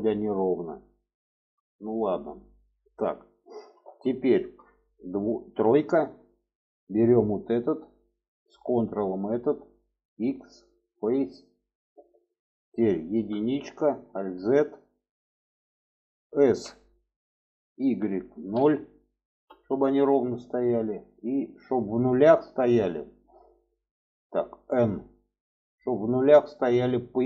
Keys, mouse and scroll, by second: 1.0 shift+middle click, 2.9 middle click, 4.1 shift+middle drag, 5.4 3, 6.5 middle click, 7.3 click, 8.6 ctrl+click, 9.8 x, 11.5 alt+middle click, 13.5 alt+1, 13.7 alt+z, 14.3 click, 16.2 s, 24.5 n.